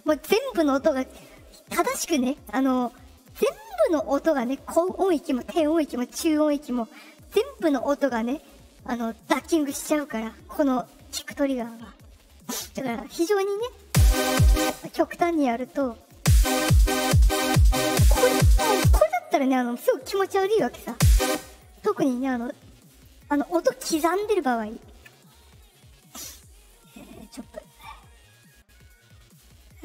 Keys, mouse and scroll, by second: 13.8 space, 14.5 space, 15.2 click, 16.1 space, 18.8 space, 20.8 space, 21.2 space, 21.5 click, 21.6 click, 24.7 ctrl+click, 26.0 click, 26.8-27.7 drag.